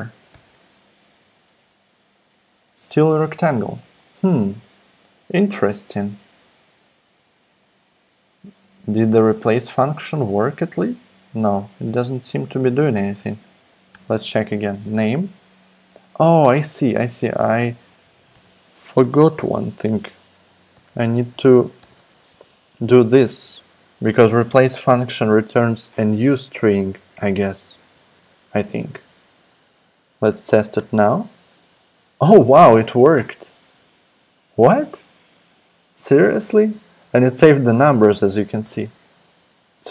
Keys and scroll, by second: 0.3 alt+super+p, 1.1 alt+super+p, 3.2 super+z, 3.8 super+Tab, 10.8 super+Tab, 13.9 Return, 14.4-15.4 typing, 16.2 super+BackSpace, 17.0 Up, 17.2 super+Left, 17.8-21.9 typing, 27.9 super+s, 28.6 super+Tab, 30.8 alt+super+p, 33.7 super+z, 38.6 alt+super+p.